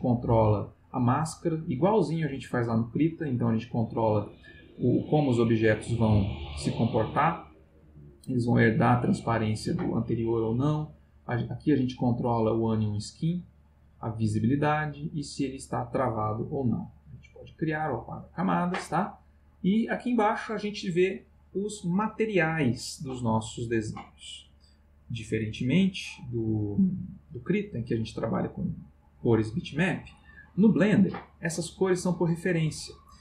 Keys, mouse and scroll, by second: 0.0 click, 0.8 click, 1.4 click, 1.9 click, 2.4 click, 2.9 click, 3.4 click, 11.0 click, 11.7 click, 12.2 click, 12.7 click, 13.2 click, 14.2 click, 14.6 click, 15.4 click, 15.9 click, 16.5 click, 16.9 click, 20.0 click.